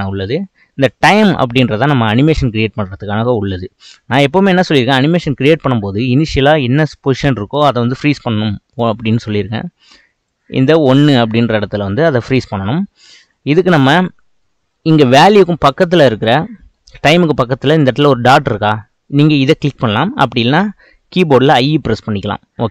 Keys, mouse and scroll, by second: 4.4-8.0 shift+middle drag, 10.3-13.3 drag, 21.7-22.7 scroll up 1.